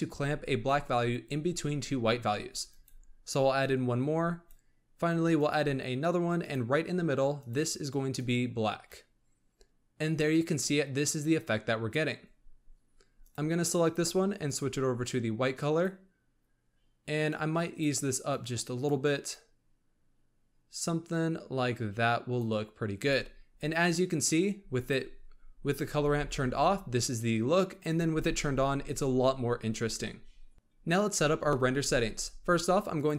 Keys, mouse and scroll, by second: 2.7-7.5 drag, 13.1 click, 17.3-22.5 drag, 24.8 click, 25.9 m, 27.8 click, 28.0 m, 30.5-31.4 scroll up 1, 32.9 click.